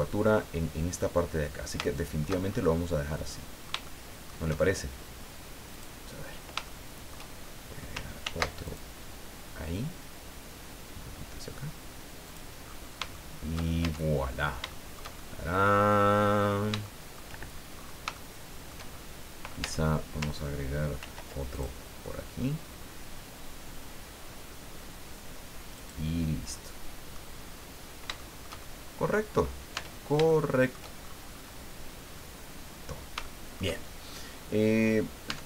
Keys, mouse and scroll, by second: 1.8 shift+middle click, 2.5-2.8 shift+scroll up 3, 3.1-4.4 drag, 5.7 click, 6.6 shift+click, 8.2 ctrl+r, 8.6 ctrl+click, 12.2 click, 12.6 scroll down 2, 13.1 shift+middle click, 13.8 shift+Tab, 14.3-14.6 shift+scroll down 4, 14.7 shift+middle click, 15.5 middle click, 16.4 scroll down 2, 16.8 shift+middle click, 17.7-18.0 shift+scroll up 3, 18.1 shift+middle click, 19.6 Tab, 21.0 ctrl+r, 21.5 ctrl+click, 25.8 click, 26.2 scroll down 2, 26.5 middle click, 27.5-28.1 scroll down 5, 28.2-29.3 shift+middle drag, 29.3-29.8 scroll up 2, 29.8 Tab, 30.3 shift+middle click, 31.0-31.6 shift+scroll up 3, 33.2 shift+middle click, 34.0-34.4 shift+scroll down 3, 35.3 Tab.